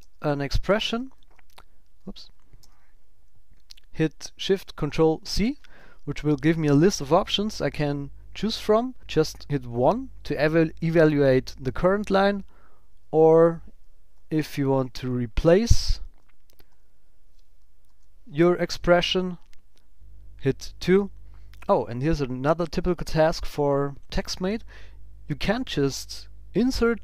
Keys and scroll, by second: 0.3 shift+=, 1.1 shift+1, 12.8 Return, 16.0 shift+=.